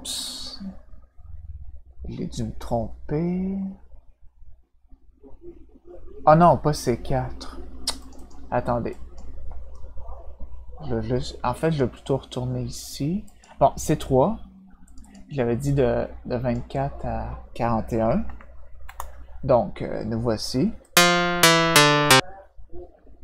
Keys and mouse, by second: 8.0 click, 8.1 click, 8.9 click, 13.2 click, 14.8 click, 15.0 click, 15.6 click, 18.8 Return, 20.8-22.0 drag.